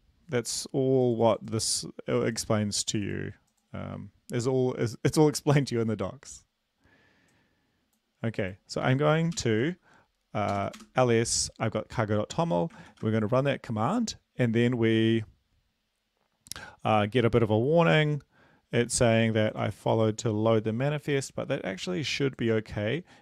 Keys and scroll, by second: 4.3 super+Up, 9.3 ctrl+l, 10.4 typing, 12.8 ctrl+v.